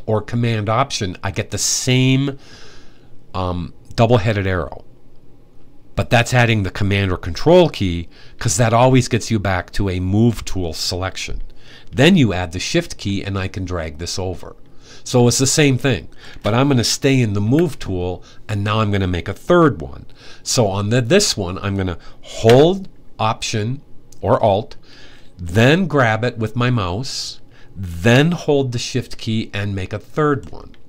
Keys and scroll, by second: 17.2 v.